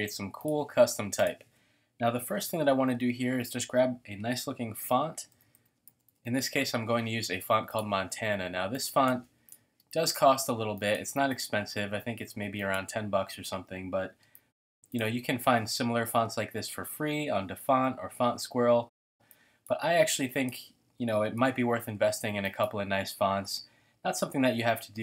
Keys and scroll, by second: 4.4-6.7 typing, 9.8 space, 14.2 space, 21.4 t.